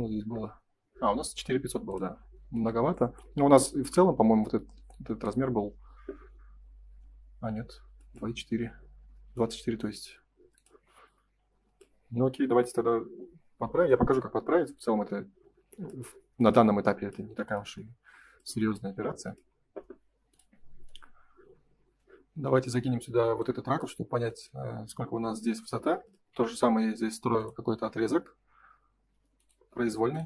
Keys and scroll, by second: 4.6 space, 24.7 space, 29.7 space.